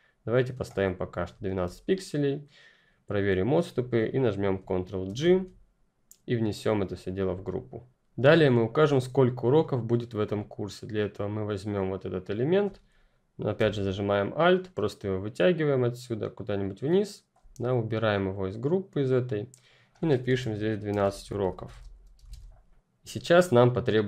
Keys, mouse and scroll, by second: 0.8-1.4 ctrl+scroll down 2, 4.5-5.0 ctrl+scroll down 1, 5.0 ctrl+g, 10.2 ctrl+click, 20.2-22.7 typing, 22.6 click.